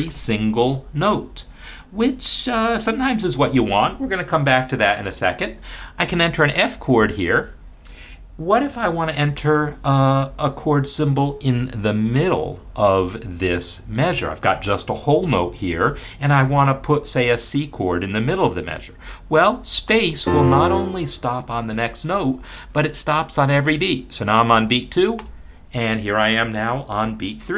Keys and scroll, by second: 0.1 space, 3.3 space, 6.7 shift+f, 19.9 space, 25.2 space.